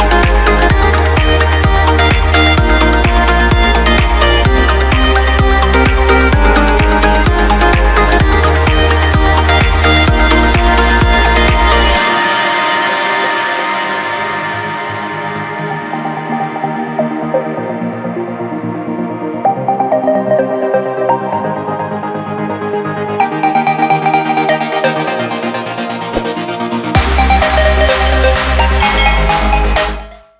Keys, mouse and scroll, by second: 3.3 click, 20.0 scroll up 1, 22.5 F8.